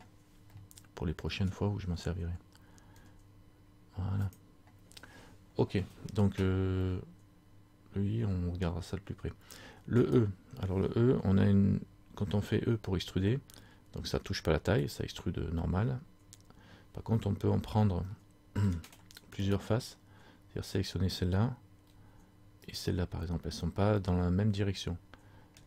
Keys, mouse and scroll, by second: 0.8 middle click, 1.7-3.0 scroll down 1, 3.0 s, 4.5 click, 7.0 middle click, 7.0 scroll up 1, 10.2 right click, 12.7 e, 18.3 middle click, 19.7 right click, 22.8 shift+right click, 24.2 middle click.